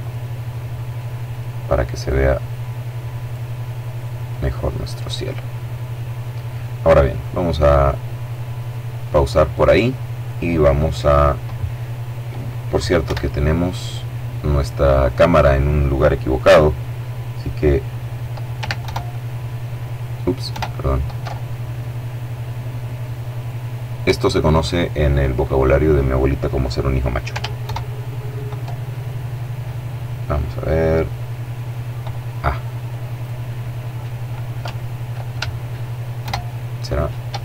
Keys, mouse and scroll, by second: 0.6 click, 1.4-3.1 drag, 3.6 click, 8.4 click, 12.4 KP_1, 18.2 ctrl+alt+KP_0, 20.0 KP_0, 22.7 click, 27.0 alt+shift+KP_0, 32.5 right click, 35.5 ctrl+shift+KP_0, 36.9 alt+KP_0.